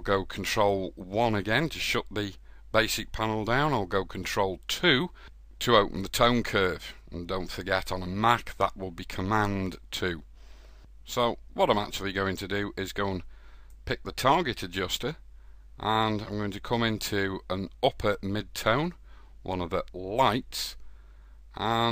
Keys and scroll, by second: 2.1 ctrl+2.